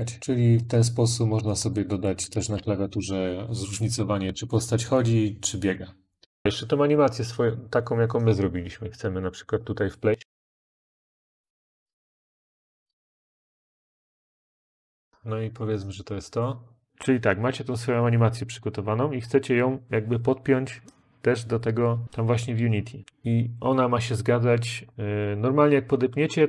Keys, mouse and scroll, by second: 0.3 Up, 0.4 Up.